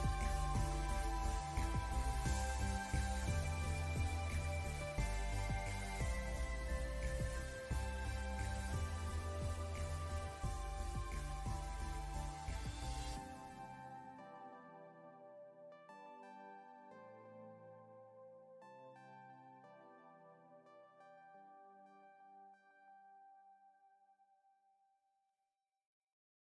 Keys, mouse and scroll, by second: 2.0 click, 4.0 alt+scroll down 1, 4.5 click, 5.8 alt+scroll down 1, 6.1-6.4 scroll up 2, 6.5 click, 6.6 scroll down 1, 6.8 alt+scroll up 2, 7.3 ctrl+s, 7.4 click, 7.4 space, 7.6 click, 8.0 scroll down 1, 8.3-9.5 drag, 10.2 scroll up 2, 10.6 scroll down 1, 10.8 click, 11.3 scroll up 1, 11.4 scroll down 2, 11.6 click, 12.1 alt+Num_Lock, 12.1 alt+scroll up 2, 12.3 alt+scroll down 1, 12.7-14.2 drag, 14.2-15.6 drag, 15.6 ctrl+z, 15.9 click, 17.3 click, 18.1 alt+scroll down 1, 18.3 alt+scroll up 1, 18.4 scroll down 2, 18.6 click, 18.8 space, 19.1 scroll up 3, 19.7 scroll down 1, 20.5 scroll up 1, 21.0-21.4 scroll down 2, 21.9-23.3 drag, 23.3 alt+scroll up 2, 23.6 click, 23.7 alt+scroll down 1, 24.6 click, 25.5 scroll down 1, 26.1 click.